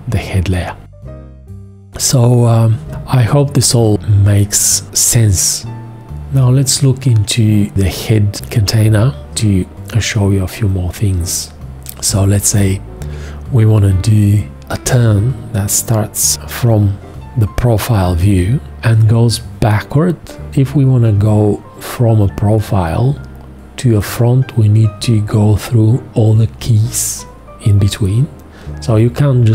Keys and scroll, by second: 2.9 space.